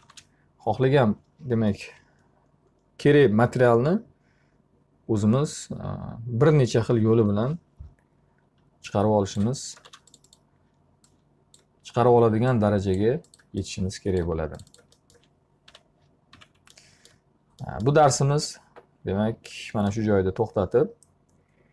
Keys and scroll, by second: 9.4 space, 15.3 p, 16.4 z.